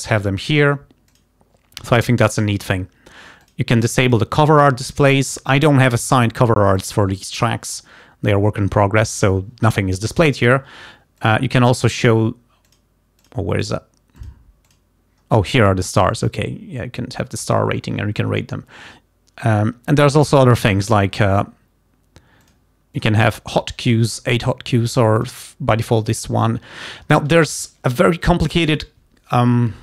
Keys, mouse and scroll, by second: 1.4 click, 3.4 click, 4.1 click, 11.2 click, 12.0 click, 12.7 click, 13.4 click, 13.8 click, 14.2 click, 14.8 click, 22.4 click, 23.3 click, 25.3 click.